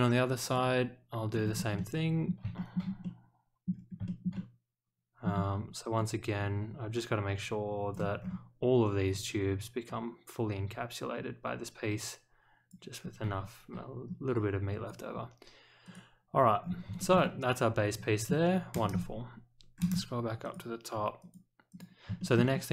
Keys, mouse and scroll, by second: 0.4 click, 1.4 scroll up 1, 1.7-2.2 middle drag, 2.5 shift+middle click, 3.0-3.6 middle drag, 3.7 scroll down 1, 4.0 shift+middle click, 4.3-5.2 middle drag, 5.9-7.9 drag, 8.2 scroll down 2, 9.8-12.7 drag, 13.0-13.7 scroll up 2, 14.3 click, 15.8 click, 16.6 scroll up 1, 17.0 shift+middle click, 17.2-18.2 middle drag, 18.9-19.6 scroll up 3, 20.4 click, 21.2 click, 21.7 click, 22.2 shift+middle click, 22.5 middle click.